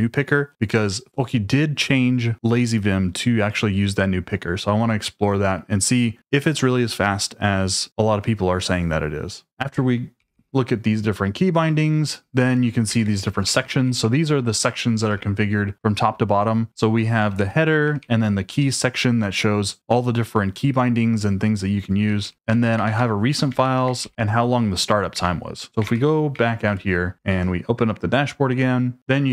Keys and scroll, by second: 10.0-15.4 typing, 15.1 Escape, 16.6-18.3 typing, 21.8-24.0 typing, 23.5 Escape, 25.1 Escape, 25.8-27.4 typing, 26.7 Return.